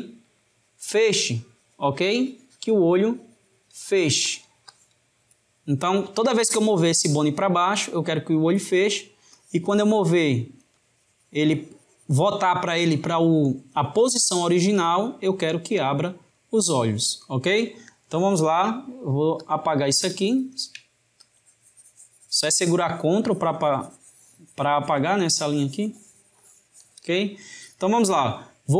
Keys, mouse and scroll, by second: 4.3-7.7 drag, 9.3-13.7 drag, 19.4-24.2 drag.